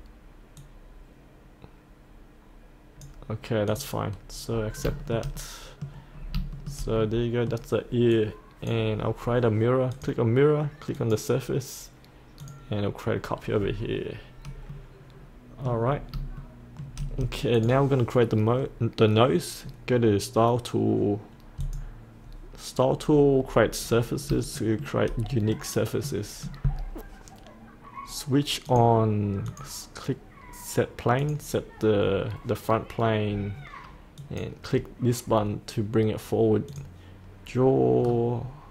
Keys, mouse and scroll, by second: 0.6-4.4 drag, 4.4-4.8 scroll up 1, 5.0 shift+middle click, 6.1 scroll down 1, 6.5 shift+middle click, 8.1 click, 13.5-14.7 scroll up 1, 14.7 middle click, 15.8 scroll down 1, 16.3 shift+middle click, 17.5 click, 23.8-24.3 scroll down 1, 24.5 shift+middle click, 25.4 middle click, 28.6-35.4 drag, 38.0-38.7 scroll down 1.